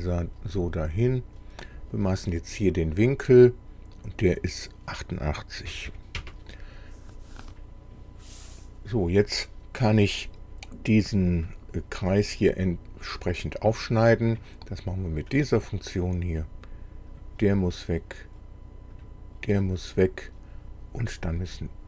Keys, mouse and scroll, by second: 0.5 click, 1.6 click, 3.0 click, 5.7 KP_8, 5.9 KP_8, 6.2 KP_Enter, 15.3 click, 17.1 click, 19.0 click.